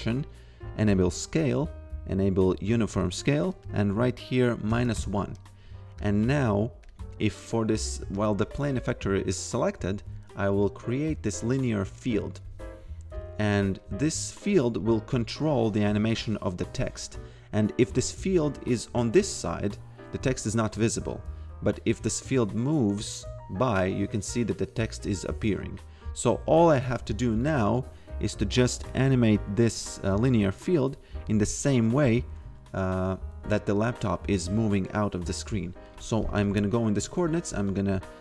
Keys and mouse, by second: 2.9 click, 5.0 Return, 6.8 click, 10.6 click, 13.1 click, 15.4 click, 19.4 click, 27.6 click, 35.9 click.